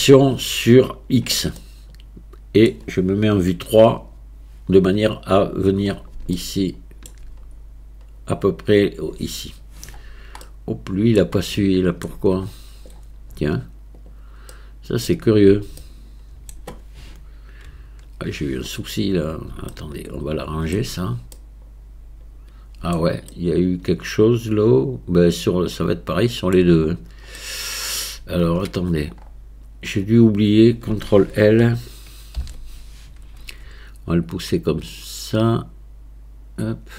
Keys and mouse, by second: 1.6-2.7 middle drag, 3.8 KP_3, 6.4-7.2 shift+middle drag, 10.4-11.4 middle drag, 11.5-12.1 shift+middle drag, 14.0 click, 14.5-15.1 middle drag, 15.8-16.5 shift+middle drag, 17.6 KP_1, 19.7-20.8 shift+middle drag, 21.4-26.6 middle drag, 27.4-28.0 middle drag, 28.5 Tab, 32.4 ctrl+l, 34.3-36.9 drag.